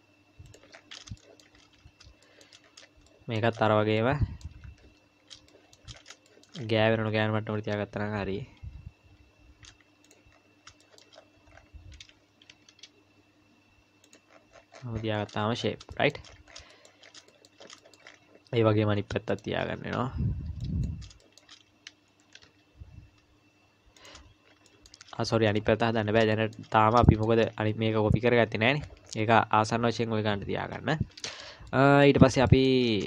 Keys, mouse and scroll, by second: 0.7-1.1 scroll up 7, 1.2 shift+middle click, 2.6-3.1 scroll up 2, 3.1 shift+middle click, 3.5-4.0 scroll up 2, 4.0 middle click, 4.6 KP_1, 5.2 scroll up 2, 5.5 shift+middle click, 5.9-7.5 scroll up 8, 6.3 shift+middle click, 7.5-8.2 scroll down 3, 8.2 g, 10.3-12.2 scroll up 11, 10.8 shift+middle click, 12.2-13.5 scroll up 1, 12.2 g, 14.3-17.3 scroll down 43, 15.9 shift+middle click, 16.7 shift+middle click, 17.3 shift+middle click, 18.0 shift+middle click, 18.1-18.6 scroll up 1, 18.6-19.3 scroll up 10, 19.3 shift+middle click, 20.6 click, 21.2 shift+middle click, 22.2 g, 24.7 shift+middle click, 25.1-25.5 scroll down 4, 25.6 shift+middle click, 26.0 scroll down 2, 26.3 shift+middle click, 26.8 scroll down 2, 27.0 shift+middle click, 30.7 Tab, 31.7 shift+middle click, 32.2 scroll up 3, 32.5 shift+middle click.